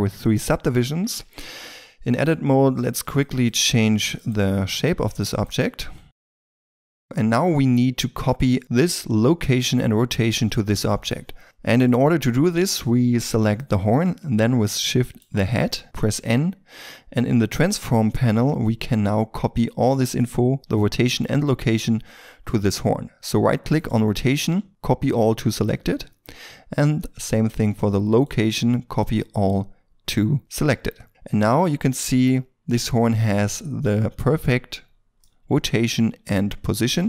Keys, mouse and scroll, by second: 0.8 Tab, 1.4 s, 4.8 c, 5.4 right click, 5.8 s, 6.1 double click, 6.2 ctrl+r, 6.3 ctrl+click, 6.4 alt+right click, 6.6 s, 6.7 c, 6.9 scroll down 1, 7.0 Tab, 7.0 middle click, 8.6 right click, 11.1-11.4 scroll up 1, 11.4 middle click, 13.5 right click, 15.0 shift+right click, 16.0 n, 23.7 right click, 28.0 right click, 30.9 scroll up 1, 31.1 middle click, 32.8-33.9 scroll up 1, 33.9 middle click, 36.8 Tab.